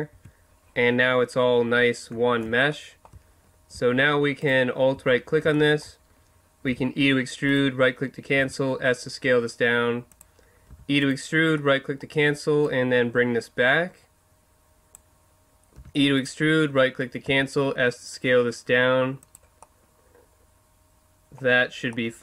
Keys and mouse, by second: 0.1 Tab, 0.8-4.4 middle drag, 4.4 right click, 6.7 e, 8.3 s, 9.4 click, 10.1 click, 10.7 e, 10.9 click, 11.5 middle click, 12.6-13.9 middle drag, 13.9 click, 15.7 e, 16.2-18.2 drag, 17.2 s, 19.3 click, 19.8-21.0 middle drag, 21.9-22.2 middle drag.